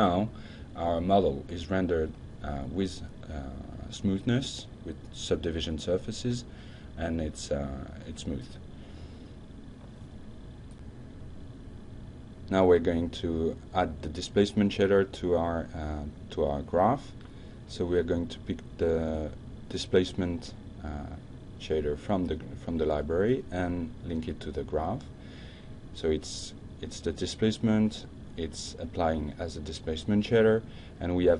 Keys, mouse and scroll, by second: 14.0 click, 16.0-16.7 drag, 17.1 drag, 17.8 click, 19.4 d, 19.7 s, 21.0 Down, 21.4 Return, 22.4-23.4 drag, 23.6-24.0 drag.